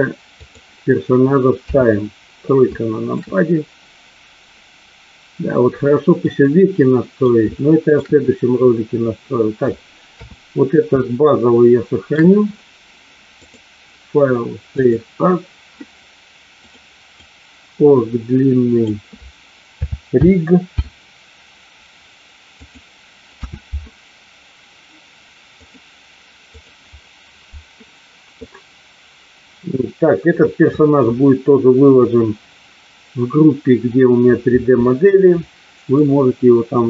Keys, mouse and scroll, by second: 1.5 KP_3, 2.7-3.0 shift+middle drag, 6.2-7.2 middle drag, 7.5-7.9 shift+middle drag, 10.0 KP_3, 11.0-12.2 shift+middle drag, 13.3-15.0 drag, 35.9-36.8 middle drag.